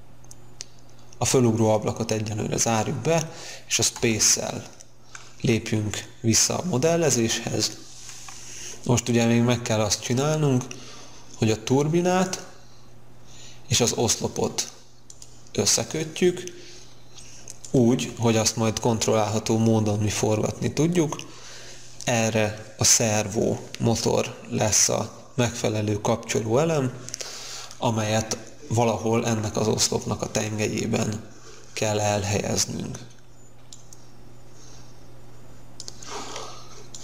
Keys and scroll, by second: 3.9 space.